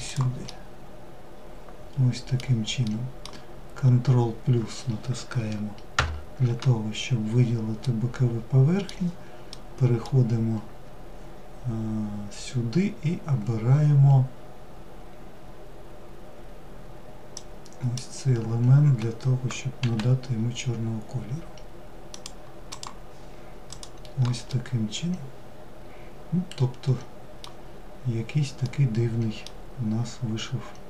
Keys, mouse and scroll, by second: 2.9-4.5 scroll up 3, 5.2 ctrl+KP_Add, 6.4-6.7 scroll down 3, 7.1-11.9 middle drag, 16.6 drag, 21.9 click, 22.9 click, 23.8-26.7 middle drag, 27.0-27.5 scroll down 4, 27.9-29.6 middle drag, 29.6-30.8 scroll up 1.